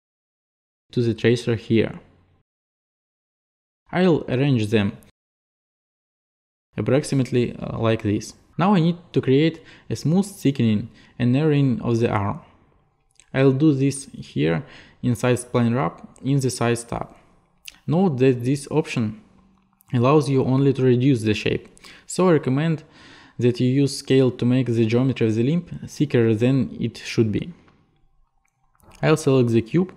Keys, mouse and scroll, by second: 1.3 click, 3.4 click, 5.3 click, 6.1 click, 6.7 click, 6.9 click, 8.0 click, 14.1 click, 16.2 click, 20.8 click, 21.9 click, 22.6 click.